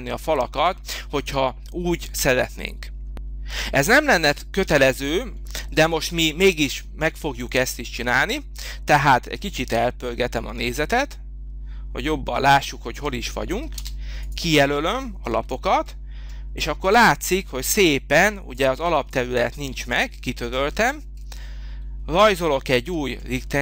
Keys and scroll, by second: 13.7 space, 15.3 Delete, 19.3 Delete.